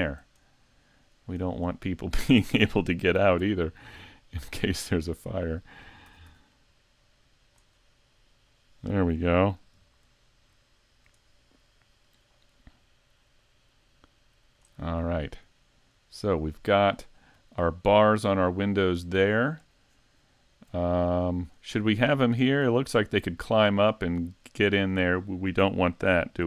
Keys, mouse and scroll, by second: 0.0-0.4 scroll up 2, 0.4 shift+middle click, 1.7 middle click, 3.2 s, 5.1 click, 6.1 s, 7.5 click, 7.8 middle click, 9.6 KP_Decimal, 10.3-10.7 scroll down 1, 10.7 shift+middle click, 11.2 middle click, 13.4 click, 14.9-15.3 scroll down 2, 15.3 middle click, 16.1-16.6 scroll down 3, 16.6 shift+middle click, 17.2-17.8 scroll down 2, 17.6 shift+middle click, 21.0 middle click, 21.9-22.3 scroll up 3, 22.3 shift+middle click, 24.7 right click.